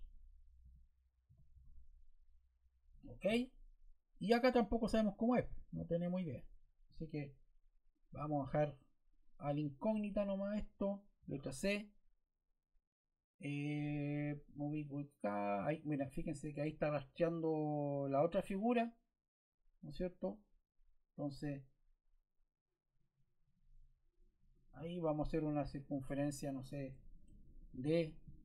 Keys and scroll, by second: 1.2 8, 1.4 2, 2.8 Return, 11.1 c, 26.8 Escape, 27.2 d.